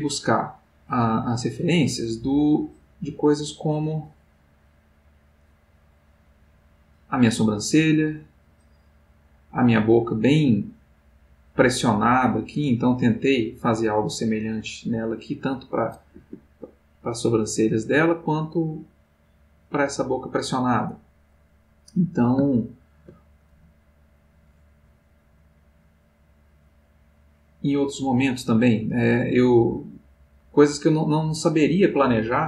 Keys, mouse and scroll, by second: 2.7 click, 3.8-5.1 drag, 5.4-7.4 drag, 8.2-12.6 drag, 15.3-16.9 drag, 16.2 Escape, 17.1-18.2 drag, 22.4 ctrl+middle click, 26.0-31.6 drag.